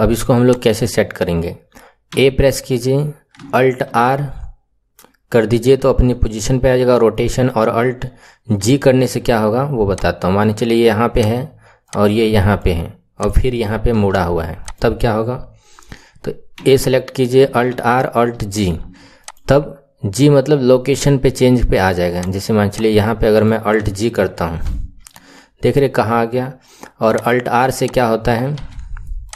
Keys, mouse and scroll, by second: 0.4 click, 2.0 a, 4.0 alt+r, 8.7 alt+g, 9.8 click, 11.1 click, 13.1 click, 13.8 r, 16.6 a, 17.8 alt+r, 18.4 alt+g, 19.2 click, 22.1 click, 24.8 alt+g, 27.1 click, 27.8 click, 28.5 r.